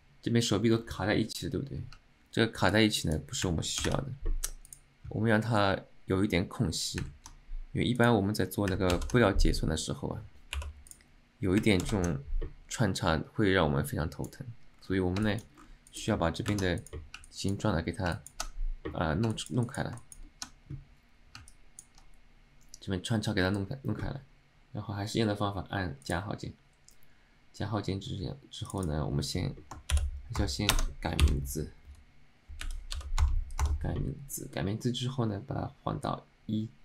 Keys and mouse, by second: 2.8-3.2 drag, 4.7-5.9 drag, 8.2 click, 13.0-14.5 drag, 14.9 c, 15.3 shift+middle drag, 16.0 click, 16.9 click, 17.3-17.7 middle drag, 18.2 middle click, 19.4 shift+middle click, 19.8 alt+middle click, 20.1 alt+shift+middle drag, 21.6 alt+middle click, 26.1 click, 28.8-34.4 drag, 36.2-36.8 drag.